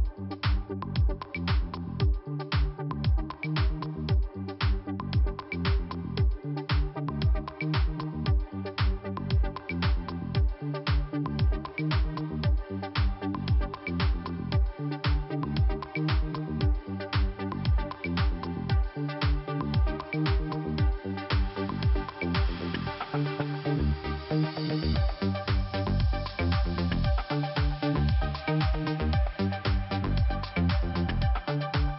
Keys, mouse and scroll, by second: 1.3 click, 1.4 click, 5.7 click, 5.8 click, 6.4 scroll up 2, 7.9 click, 8.0 click, 9.5 click, 9.6 click, 12.4 click, 14.2 click, 14.3 click, 15.4 click, 18.2 click, 20.1 scroll down 1, 20.7 right click, 21.4 click, 22.1 click, 23.5 click, 26.0 right click, 27.7 click, 29.2 click.